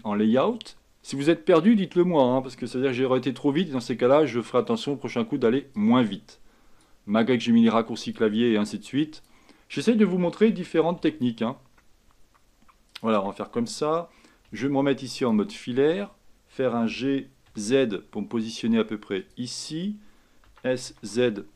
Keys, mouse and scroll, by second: 0.0 click, 0.6-1.8 scroll down 2, 1.8 KP_1, 3.2-8.4 shift+middle drag, 8.4-10.7 drag, 10.7 s, 15.4 z, 17.0 g, 20.6 s.